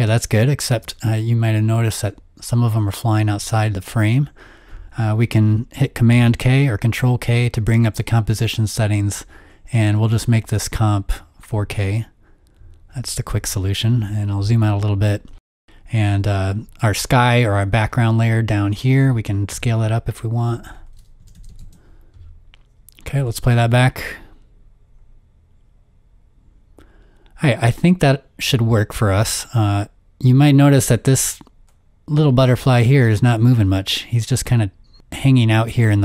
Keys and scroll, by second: 0.0 space, 0.6 space, 6.1 super+k, 7.4 super+k, 13.3 z, 19.5 s, 21.0-22.0 typing, 23.6 typing, 25.0 typing.